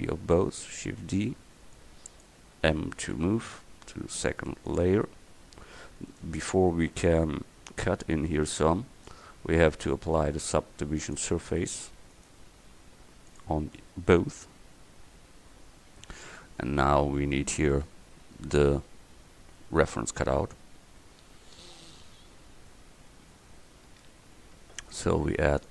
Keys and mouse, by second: 1.0 shift+d, 3.2 m, 12.2-13.7 right drag, 13.7-14.4 middle drag, 14.4-19.6 drag, 24.8-25.7 drag.